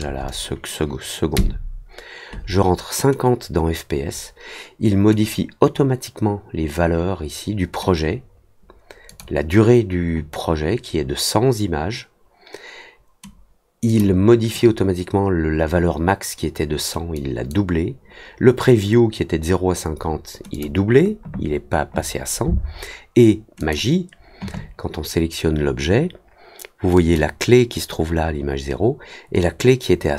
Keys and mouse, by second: 9.0 click, 13.8 click, 17.1 click, 20.5 click, 23.5 click, 26.9 click.